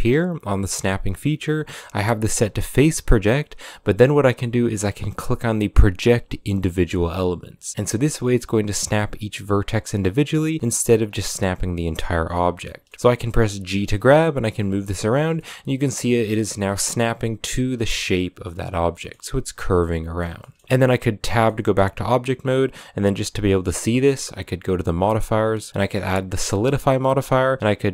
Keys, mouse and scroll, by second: 12.1 middle click, 12.8 scroll up 1, 12.8 middle click, 13.5 g, 15.1-21.0 middle drag, 21.0 Tab, 21.2-23.3 middle drag, 23.3 scroll up 3, 23.6-26.0 middle drag, 26.0 click, 26.4 middle click, 27.2-27.9 shift+drag.